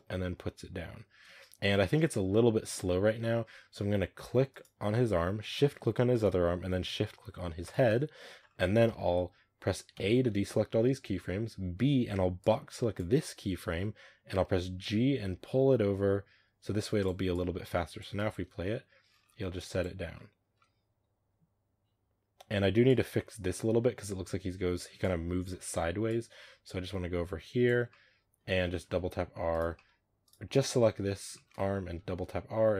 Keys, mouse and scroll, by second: 0.7 space, 4.4 right click, 6.0 shift+right click, 7.5 shift+right click, 14.7 g, 17.2-18.1 drag, 18.1 space, 19.1 scroll down 5, 19.4-22.5 drag, 22.5 space, 22.7-27.8 drag, 27.8-28.3 middle drag, 28.3 scroll up 2, 28.7 r, 29.6-30.1 middle drag, 30.1 right drag, 30.4 scroll down 1, 30.7-31.0 middle drag, 31.0 scroll up 1, 31.2 shift+middle drag, 31.8 r.